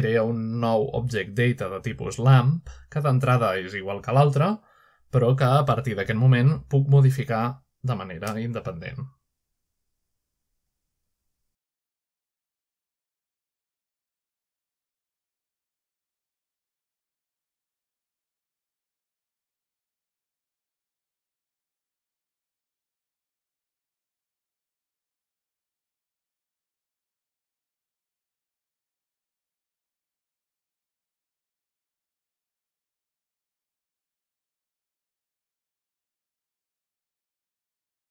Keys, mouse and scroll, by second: 0.1 click, 1.6 click, 2.0 x, 2.2 click, 3.2 click, 3.7 click, 5.5 click, 6.3-9.6 drag, 11.0-11.5 middle drag, 11.9 click, 12.5-14.1 drag, 14.3-14.9 middle drag, 14.6-15.7 scroll up 1, 15.2-16.3 shift+middle drag, 16.0-16.9 scroll up 1, 16.9 middle click, 17.8-22.1 drag, 23.2 click, 25.0 click, 27.7-30.5 drag, 31.2 click, 32.1 click, 32.5 click, 33.2 click, 34.6-35.3 scroll down 1, 35.3-36.1 middle drag, 35.6-36.6 scroll up 1, 36.6-38.1 scroll up 1.